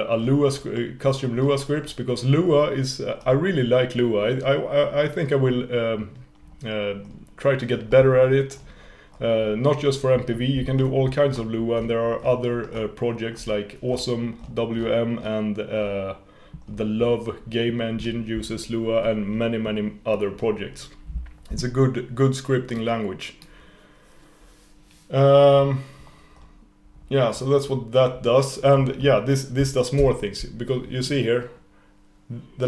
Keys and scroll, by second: 30.0 super+/.